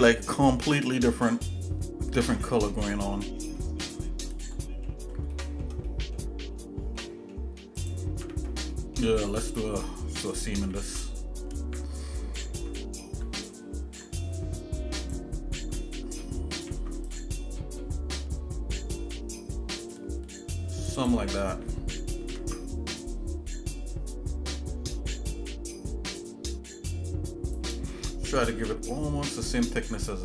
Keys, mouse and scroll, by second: 3.6 shift+middle click, 4.2-4.6 scroll down 2, 4.6 middle click, 5.3 shift+middle click, 5.9 middle click, 7.0 shift+middle click, 7.8 click, 8.2 Tab, 8.7 middle click, 10.6 ctrl+g, 13.8 ctrl+i, 15.0 click, 16.5 ctrl+r, 22.2 ctrl+b, 28.0 shift+middle click, 29.8 shift+middle click.